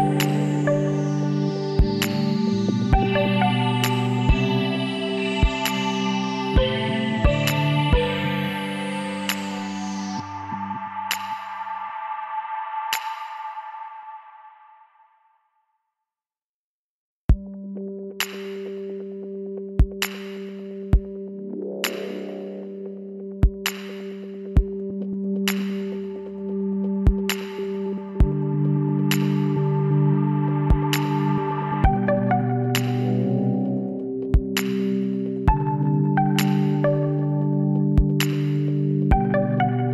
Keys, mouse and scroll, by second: 1.6-2.8 middle drag, 2.8 KP_1, 3.9 middle click, 4.9 middle click, 5.4-7.1 middle drag, 7.1 shift+s, 9.6 shift+a, 12.2 s, 15.6 g, 18.2-22.5 middle drag, 22.6 Tab, 24.7 w, 34.0-35.6 middle drag, 35.6 KP_3, 36.9 z, 38.8 ctrl+r.